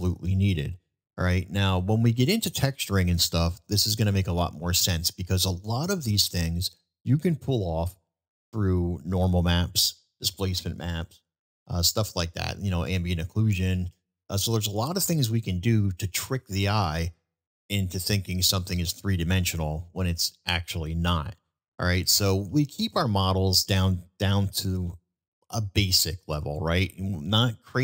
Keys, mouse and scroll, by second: 0.5-1.0 middle drag, 1.7-2.1 middle drag, 3.1 middle drag, 4.2-5.0 middle drag, 8.3-8.7 middle drag, 11.6 middle drag, 12.7-13.1 middle drag, 13.6-13.9 middle drag, 18.4-19.1 middle drag, 20.4-20.8 middle drag, 22.5-23.1 middle drag, 24.9 shift+middle drag, 25.5 shift+middle drag, 27.0-27.7 middle drag.